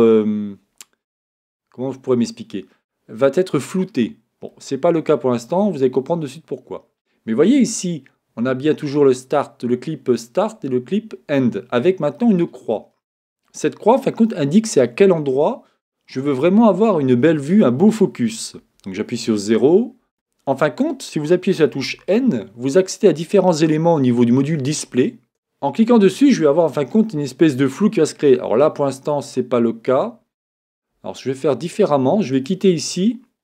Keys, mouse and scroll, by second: 4.5-6.8 middle drag, 12.1-18.6 middle drag, 18.6 KP_0, 21.8 n, 23.0-25.0 middle drag, 28.3-30.9 middle drag, 32.3-33.4 drag.